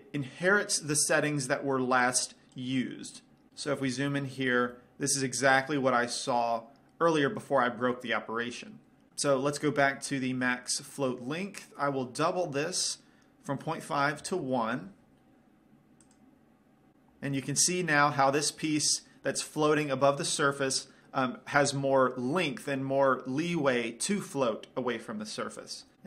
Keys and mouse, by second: 2.3-3.5 drag, 3.9-10.8 middle drag, 12.6-14.5 drag, 16.8 click.